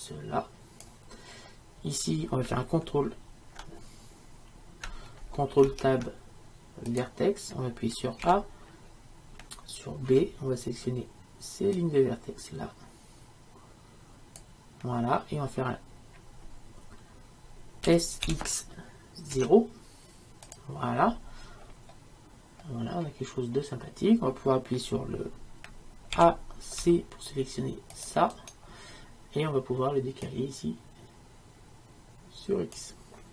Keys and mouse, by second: 5.7 ctrl+Tab, 8.3 a, 17.9 s, 21.5-26.2 middle drag, 26.2 a, 28.5-33.3 right drag.